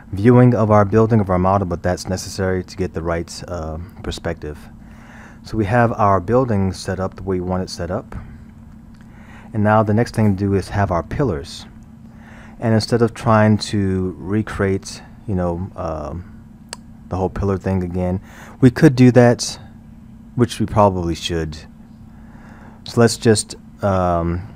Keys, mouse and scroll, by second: 4.6-7.4 middle drag, 7.4-8.1 scroll, 8.1-9.0 middle drag, 9.0-11.9 scroll, 13.6-16.6 middle drag, 21.4-24.4 middle drag.